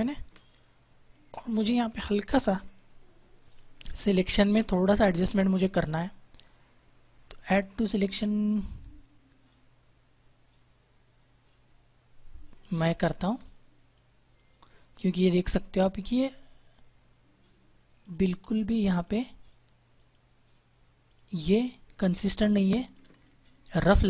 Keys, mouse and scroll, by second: 0.1 space, 0.5 click, 0.7 space, 2.5 space, 2.7 click, 3.0 space, 7.2 click, 12.7 ctrl+=, 13.3 click, 13.5 space, 14.3 click, 16.1 click, 23.0 space, 23.1 click.